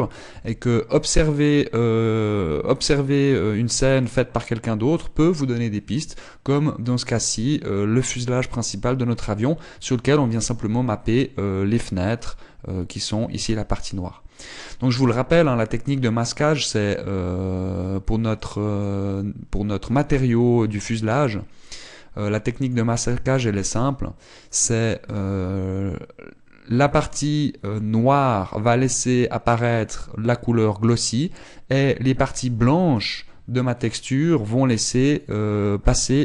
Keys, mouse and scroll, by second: 0.9 z, 1.6 middle click, 2.8 middle click, 5.0 scroll down 1, 6.0 scroll up 1, 19.0 click, 22.3 click, 24.2 click.